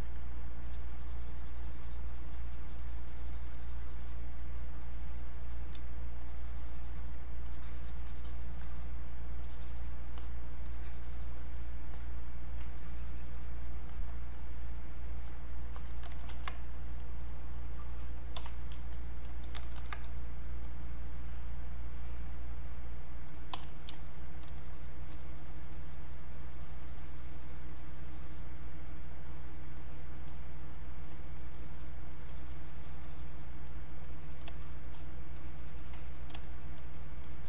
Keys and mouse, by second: 0.1-4.4 drag, 4.4-6.2 drag, 6.2-8.6 drag, 8.6-13.9 drag, 14.4 click, 16.3 ctrl+shift+1, 16.7-18.9 drag, 19.7 ctrl+shift+1, 20.6-23.9 drag, 24.5 shift+click, 24.6-33.7 shift+drag, 34.9 click, 36.5 shift+click, 37.2 shift+click.